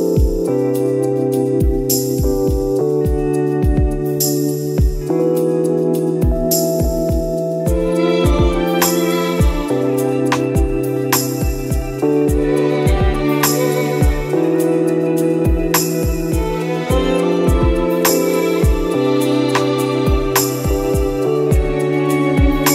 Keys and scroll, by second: 17.3 ctrl+e, 20.0 ctrl+z, 21.1 ctrl+z, 21.2 ctrl++, 22.4 ctrl+-, 22.6 ctrl+-, 22.6 ctrl++.